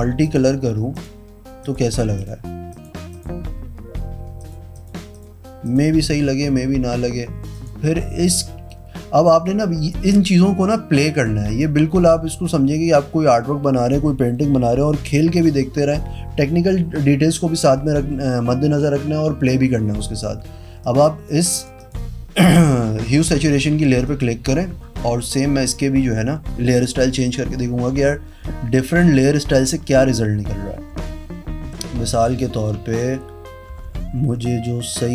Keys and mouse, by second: 0.2 click, 0.9 click, 1.6 click, 2.1 click, 2.7 click, 3.1 click, 4.3 click, 4.7 click, 5.1 click, 5.6 click, 7.5 click, 8.2 v, 11.1 click, 11.4 click, 20.8 click, 21.5 click, 21.7 click, 23.0 click, 24.0 click, 26.6-28.8 typing, 29.8-31.6 typing, 32.7 shift+-, 33.0 shift+-, 34.1-35.1 typing.